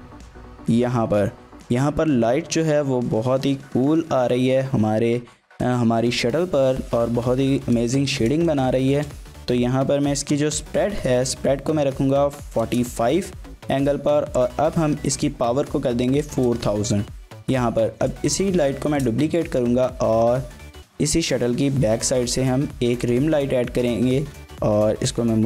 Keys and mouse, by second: 5.4 shift+middle drag, 5.5 shift+click, 7.9-8.3 shift+middle drag, 8.8 shift+middle click, 10.3-13.5 drag, 14.4-17.1 drag, 17.9 shift+d, 18.6 click, 18.9 shift+click, 19.4 r, 20.6 click, 20.9 g, 21.4 click, 21.6 r, 22.2 click, 22.4 g, 23.0 click, 23.4-23.8 middle drag, 24.2 g, 24.5 z.